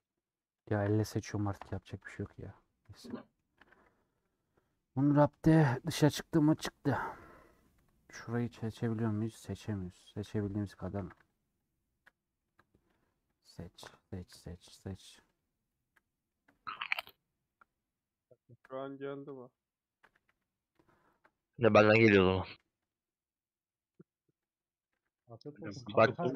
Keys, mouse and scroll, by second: 0.7 shift+click, 1.7 ;, 1.9 scroll down 4, 2.1 scroll up 1, 2.1-3.7 middle drag, 3.7 a, 6.9 middle click, 7.2 scroll up 2, 7.4 middle click, 7.9 3, 8.6 alt+Left, 8.9-10.2 middle drag, 10.2 alt+shift+Left, 10.3 middle click, 11.1 ctrl+z, 11.2 shift+click, 12.0-13.0 middle drag, 13.2 shift+click, 13.9-15.1 middle drag, 15.2 shift+click, 16.0 middle click, 17.0-18.7 shift+drag, 18.7-19.7 middle drag, 19.7 shift+click, 20.8 ;, 21.4-23.0 middle drag, 23.0 click, 23.6 middle click, 24.6 click, 25.0 a, 25.2 u.